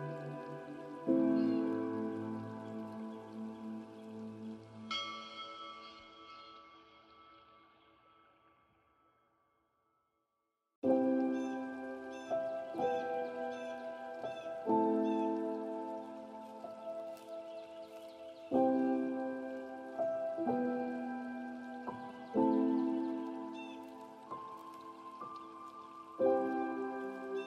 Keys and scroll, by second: 3.9 ctrl+a, 15.7 ctrl+space, 26.8 ctrl+a.